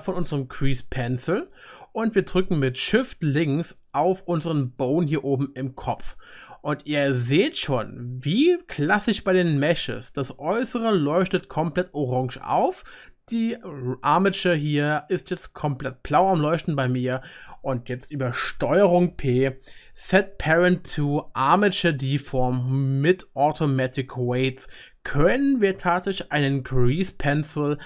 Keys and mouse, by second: 0.5-4.9 drag, 4.9-10.5 shift+right drag, 10.5-11.3 drag, 11.3-18.7 right drag, 19.0 ctrl+p, 19.3-27.8 ctrl+right drag.